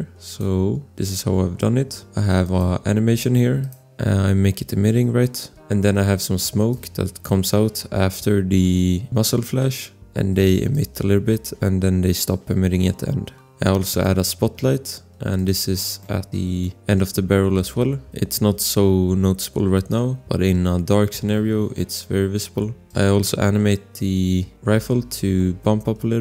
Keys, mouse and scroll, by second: 0.7 scroll, 2.4 click, 3.8 click, 6.6 click, 10.7 click, 13.0-13.8 scroll, 13.8 click, 15.8 click, 16.0 shift+scroll, 16.2 click, 16.6 click, 17.3 scroll, 18.5 scroll, 19.8 click, 20.0 click.